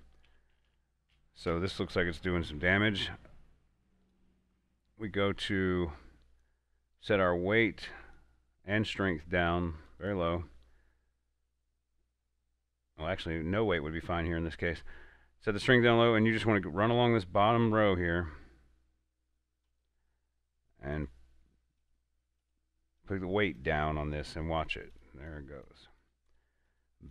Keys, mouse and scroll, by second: 0.1 Up, 0.8 Down, 1.8 Up, 4.3 click, 7.3-15.8 drag, 16.9 click, 17.0-27.1 drag.